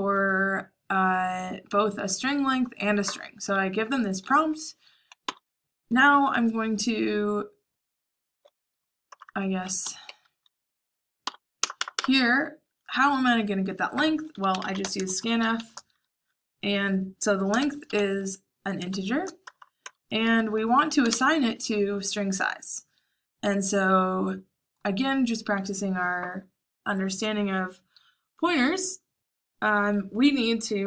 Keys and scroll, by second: 0.0-0.2 typing, 4.3-5.2 typing, 9.0-12.0 typing, 14.0-15.5 typing, 17.5-19.8 typing, 21.0 typing.